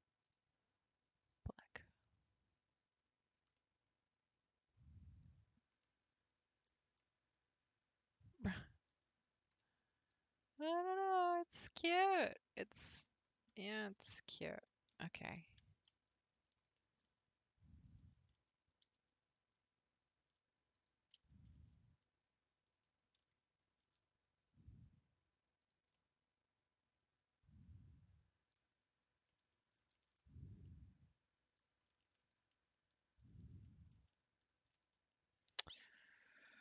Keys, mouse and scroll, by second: 0.2 click, 3.6-5.4 middle drag, 5.4-5.8 scroll down 3, 5.8-9.1 middle drag, 9.1-9.6 scroll down 3, 9.6-10.1 middle drag, 10.1-11.4 scroll up 4, 11.4 scroll down 1, 11.6-12.1 scroll up 5, 12.1-12.8 middle drag, 12.8-13.3 scroll down 1, 13.3-13.7 scroll down 3, 13.7-15.6 shift+middle drag, 15.6 Tab, 16.7-17.8 middle drag, 17.8 click, 18.4 a, 18.8 r, 21.2 s, 23.2 s, 25.9-28.7 middle drag, 28.7 scroll down 2, 29.0 scroll up 3, 29.3 middle click, 30.2-30.6 scroll up 3, 30.6-31.8 middle drag, 31.8 scroll up 3, 32.1-34.8 shift+middle drag, 34.8-36.2 scroll down 3, 36.5 middle click.